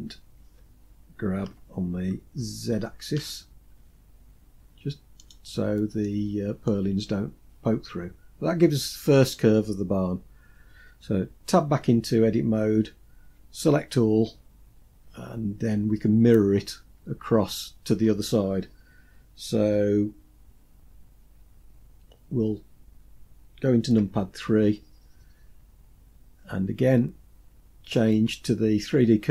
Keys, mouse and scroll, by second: 0.9 g, 5.1-5.5 scroll down 2, 5.5 middle click, 6.4 scroll down 2, 6.4 scroll up 1, 6.9-7.5 scroll down 3, 11.2 Tab, 13.7 a, 14.4-16.1 scroll down 3, 23.4 KP_3, 24.3-26.4 scroll up 4, 27.3-29.3 drag.